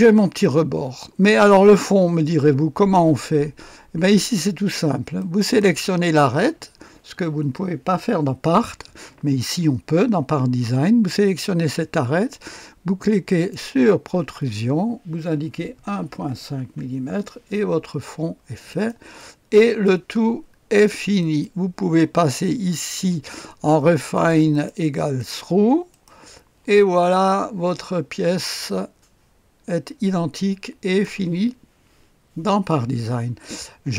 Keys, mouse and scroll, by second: 0.0 click, 5.1 middle click, 5.4 click, 13.3 middle click, 13.5 click, 15.7-16.3 typing, 16.7 Return, 18.7 middle click, 18.7-19.8 typing, 18.9 click, 19.1 middle click, 19.1 right click, 19.8 right click, 21.2 click, 22.3-24.1 scroll down 1, 24.1 middle click, 24.3 click, 24.5 typing, 24.7 click, 25.3 click, 25.7-26.4 typing, 25.9 click, 27.1-29.6 drag, 29.6-31.0 middle drag, 31.0 click, 31.4 typing.